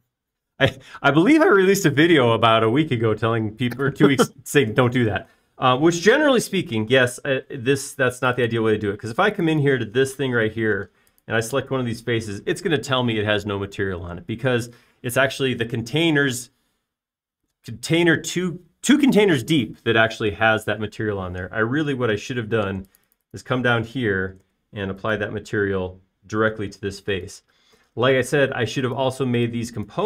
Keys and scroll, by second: 8.4 space, 26.0 b, 28.2 space, 29.4 typing.